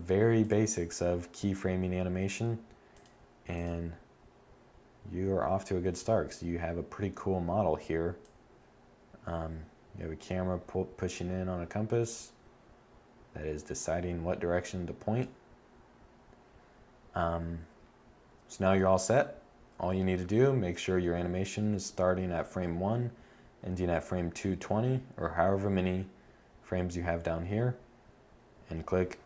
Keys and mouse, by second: 2.2 click.